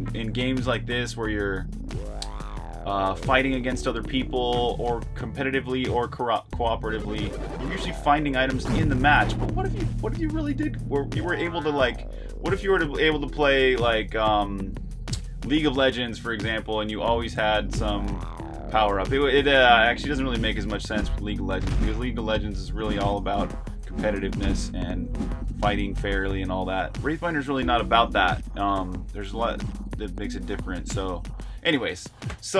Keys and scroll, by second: 0.0-0.9 typing, 4.4-7.2 typing, 8.7-12.5 typing, 14.6-15.8 typing, 17.7-29.6 typing.